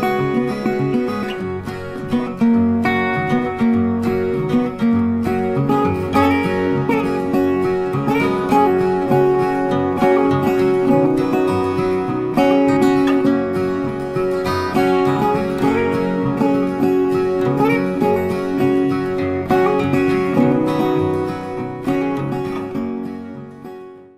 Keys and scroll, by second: 0.6 ctrl+a.